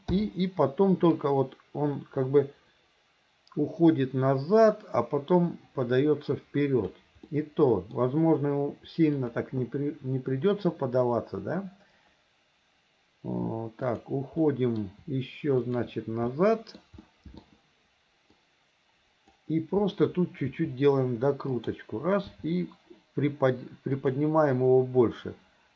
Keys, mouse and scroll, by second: 0.2 i, 1.2-7.0 drag, 7.3-8.0 middle drag, 9.2 click, 13.9 shift+click, 14.5-14.9 middle drag, 15.6 shift+click, 16.3-16.8 middle drag, 17.1-17.5 middle drag, 18.5-19.4 drag, 20.5 r, 22.4 g.